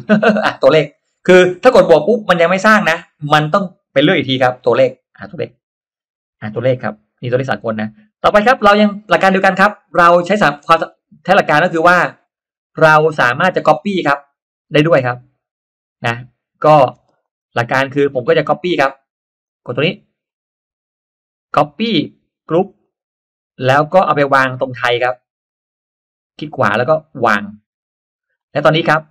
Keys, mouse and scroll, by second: 5.4 click, 9.3 click, 10.2 click, 10.6 space, 10.7-11.1 drag, 11.6 click, 12.2 middle click, 13.1 click, 13.1 middle click, 13.5-13.9 drag, 14.3 click, 16.6 middle click, 16.6 scroll up 1, 17.0 click, 17.0 space, 17.9-18.7 drag, 19.4 click, 20.3 right click, 22.7 click, 24.4 click, 25.4 click, 26.0 right click, 27.7 click.